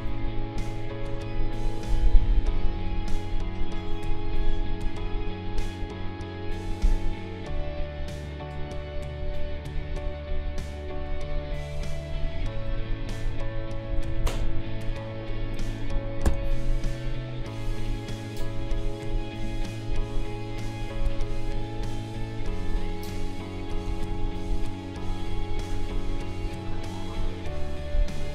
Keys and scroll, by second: 0.0 q, 2.7 Delete, 13.3 Delete, 23.9 ctrl+z.